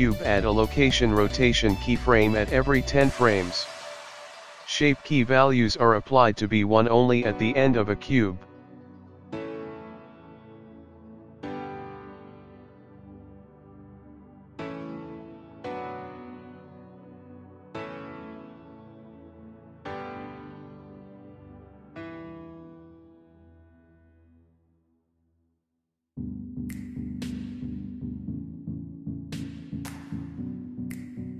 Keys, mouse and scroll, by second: 3.4 i, 6.4 click, 8.4 g, 14.3 i, 16.7 i, 18.2 click, 21.6 click, 24.4 click, 27.7 i, 28.8-29.5 scroll down 3, 30.2 shift+middle click, 31.0-31.3 scroll up 2.